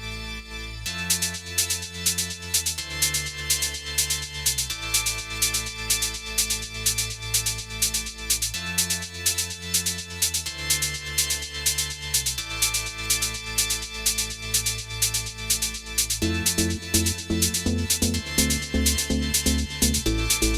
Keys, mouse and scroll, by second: 0.2 click, 0.8 click, 1.5 click, 1.9 click, 2.5 click, 3.4 click, 4.5 click, 5.0 click, 5.7 click, 6.8 click, 7.9 click, 8.6 click, 9.0 click, 9.5 click, 10.0 scroll down 1, 10.1 middle click, 11.6 click, 12.1 click, 12.5 click, 13.0 scroll down 1, 13.1 middle click, 14.8-15.7 scroll up 2, 15.7 click, 16.1-16.5 scroll up 2, 17.0 click, 17.7 click, 18.3 click, 18.7 click, 19.1 scroll down 3.